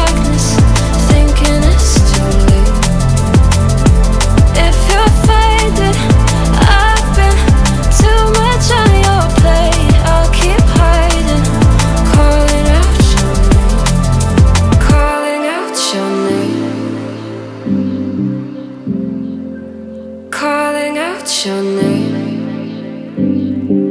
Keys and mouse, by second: 0.4-0.8 ctrl+middle drag, 1.0 middle click, 1.9-2.8 middle drag, 3.2 click, 3.5 click, 6.0 click, 6.7-10.7 drag, 20.8-21.8 middle drag.